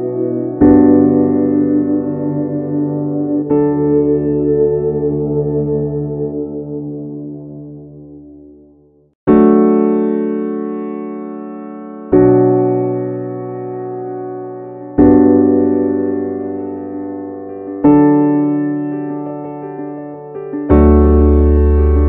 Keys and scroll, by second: 0.5 ctrl+z, 14.7 ctrl+z.